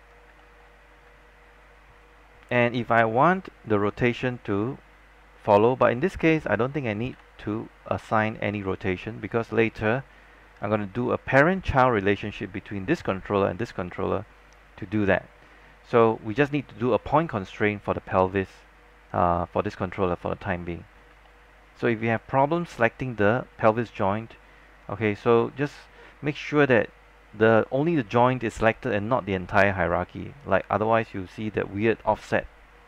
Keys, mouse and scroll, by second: 0.5 alt+middle click, 2.8 e, 4.2-7.2 drag, 7.2 z, 16.5-18.7 scroll up 1, 20.2-20.8 scroll down 1, 20.8-21.2 scroll up 1, 21.4 alt+middle click, 24.9 scroll up 1, 25.4 alt+middle click, 32.7 scroll down 1.